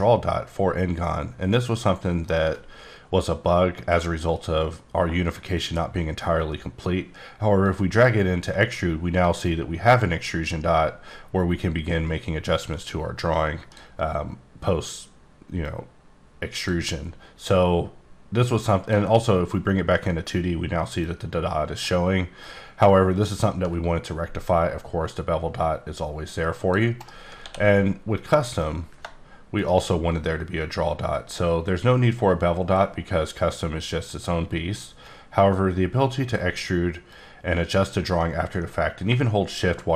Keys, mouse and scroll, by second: 1.5 middle click, 7.6 click, 9.2 click, 15.6 click, 18.4 click, 21.0 click, 22.4 click, 24.3 click, 27.0 right click, 27.4 d, 28.1 click, 28.6 click, 29.5 shift+right click, 35.0-36.6 drag, 37.1 click.